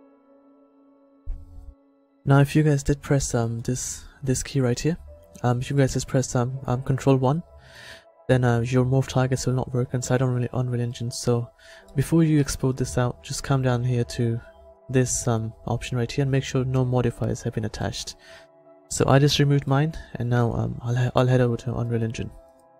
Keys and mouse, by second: 8.9-10.2 middle drag, 12.0-13.0 middle drag, 14.8-16.8 drag, 16.8-17.8 middle drag, 20.2 a.